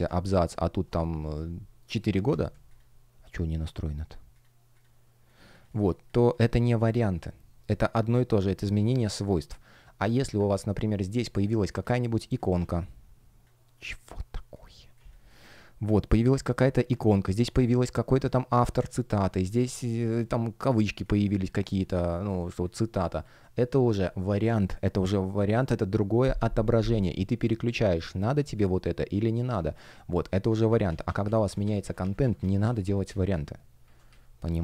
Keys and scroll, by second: 5.6 space, 11.1 shift+p, 12.5 super+z, 19.0 space, 22.7 space, 30.6 super+z.